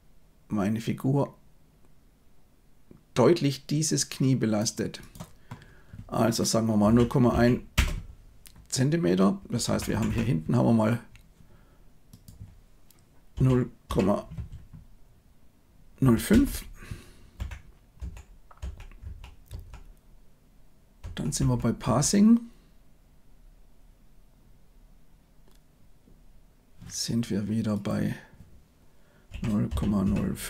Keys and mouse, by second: 4.9-7.8 drag, 9.6 Left, 9.8 Left, 10.0 Left, 12.2-16.3 drag, 17.3 Left, 17.9 Right, 18.5 Right, 19.0 Right, 19.4 Right, 21.0 Right, 21.3 Right, 21.8 Right, 27.8-30.4 drag.